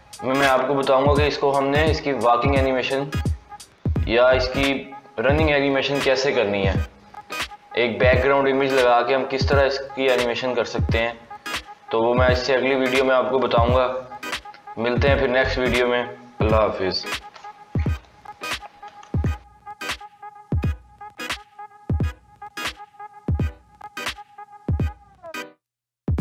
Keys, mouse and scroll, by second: 19.0 ctrl+Tab, 21.8 scroll down 2, 22.4-23.1 shift+middle drag, 23.1 scroll up 2.